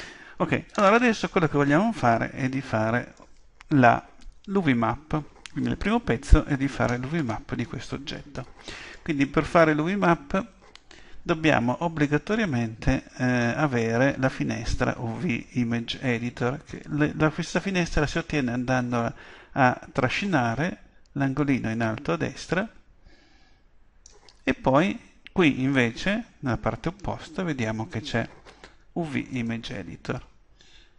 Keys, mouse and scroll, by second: 0.7-21.4 middle drag, 21.4-23.2 drag, 27.9-29.8 drag.